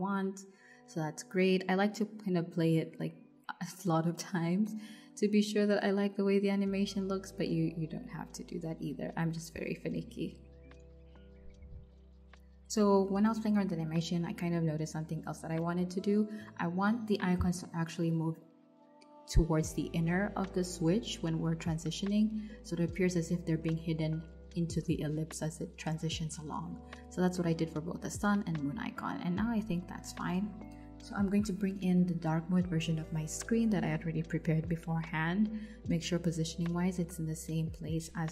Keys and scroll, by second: 14.7 shift+Right, 20.1 shift+Left, 29.3 super+c, 30.1 super+v, 37.6 r.